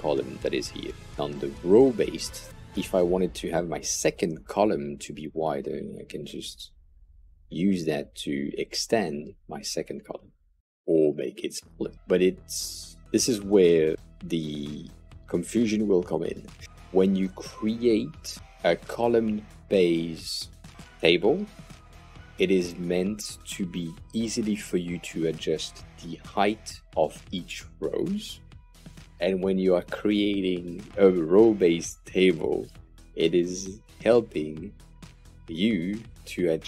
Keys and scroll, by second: 1.0 super+z, 13.0 super+z, 16.6 shift+1.